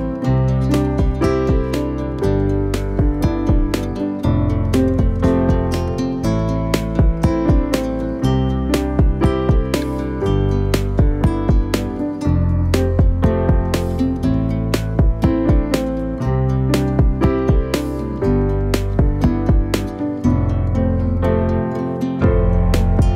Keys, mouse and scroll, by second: 0.0 click, 0.7-1.9 scroll down 15, 1.9-2.6 shift+middle drag, 2.6-3.1 scroll up 2, 3.1-4.0 shift+middle drag, 4.0 click, 4.7 scroll up 4, 5.2-5.8 shift+middle drag, 5.8 click, 6.8-7.5 shift+middle drag, 7.5-7.8 scroll up 3, 7.9 click, 8.4 shift+middle click, 9.0 Tab, 11.9 alt+click, 13.1-16.1 right drag, 18.0 Tab, 18.8-19.3 scroll down 6, 19.3 click, 19.8-20.3 scroll down 3, 20.3-20.8 shift+middle drag, 20.8-22.2 scroll up 2, 22.2 click.